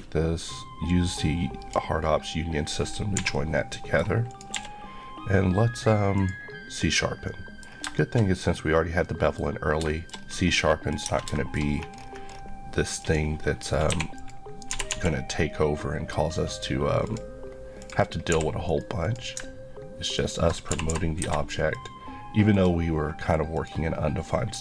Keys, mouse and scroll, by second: 0.9 click, 3.2 h, 3.3 middle click, 4.3 click, 4.6 q, 6.2 click, 7.3 middle click, 7.7 scroll down 2, 8.0 shift+middle click, 10.2 scroll up 1, 10.6 middle click, 11.1 Tab, 11.4 shift+middle click, 11.7 scroll up 1, 13.0 click, 13.9 2, 14.2 click, 14.7 g, 17.1 click, 18.0 click, 18.1 click, 18.4 g, 18.7 right click, 20.7 click, 20.7 ctrl+g, 21.2 Escape, 21.7 click.